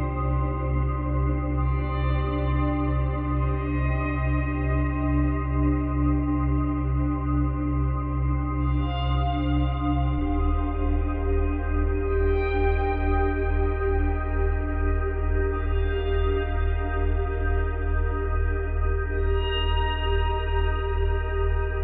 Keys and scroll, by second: 4.5 space, 6.6 space, 19.4 space.